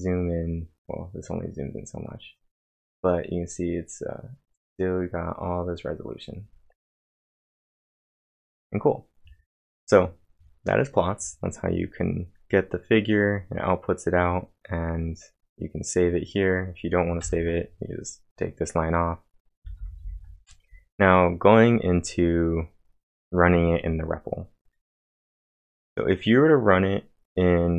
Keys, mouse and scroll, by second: 1.2 click, 3.6 click, 7.7-8.4 typing, 7.9 click, 15.9-16.6 typing, 16.1 click, 17.2 ctrl+/, 19.5-20.3 typing.